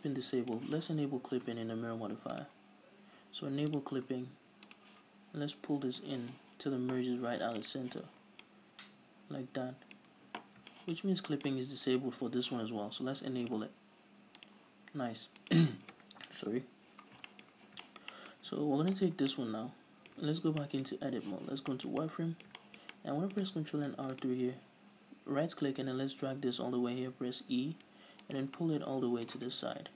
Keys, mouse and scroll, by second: 0.1-2.5 drag, 3.8-4.4 drag, 4.7 click, 6.2-8.5 drag, 8.0 z, 8.2 scroll down 2, 8.5-11.9 middle drag, 10.2 Tab, 10.5 scroll down 2, 11.1 scroll up 2, 11.9 right click, 13.5 click, 15.4 click, 17.5-19.0 middle drag, 17.5-17.9 scroll up 2, 18.4-19.0 scroll up 2, 19.0 right click, 19.4-27.9 middle drag, 20.3 Tab, 21.0 scroll up 2, 21.3 z, 21.6 scroll down 2, 23.8 ctrl+r, 28.5 shift+click, 28.6-29.8 middle drag, 29.8 KP_Decimal.